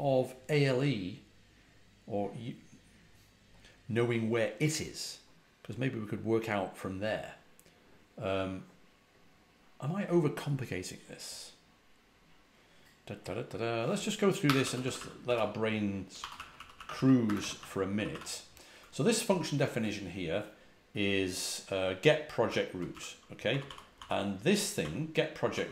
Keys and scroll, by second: 14.3-18.0 typing, 22.4-25.0 typing.